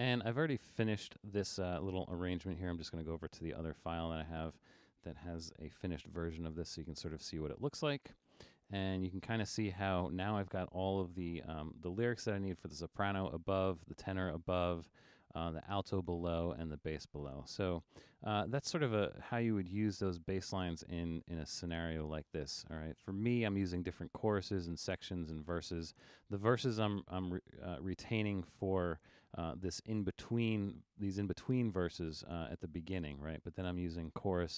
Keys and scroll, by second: 5.5 super+=, 5.9 super+=, 6.5 super+=.